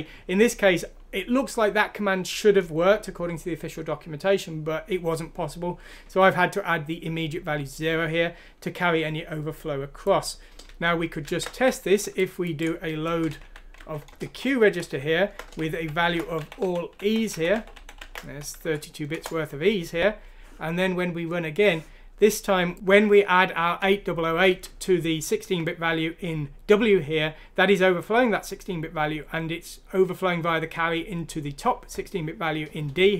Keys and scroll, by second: 10.7 ctrl+z, 11.3 ctrl+z, 13.2-18.5 typing, 18.6 F6, 19.1 Return.